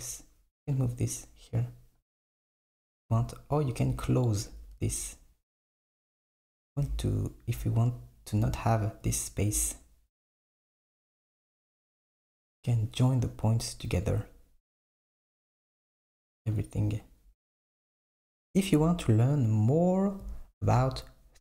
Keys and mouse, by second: 1.2 click, 4.6 Tab, 6.1 Tab, 6.4 click, 6.8 Tab, 10.7 click, 11.9 click, 14.1-17.3 drag, 20.0 click.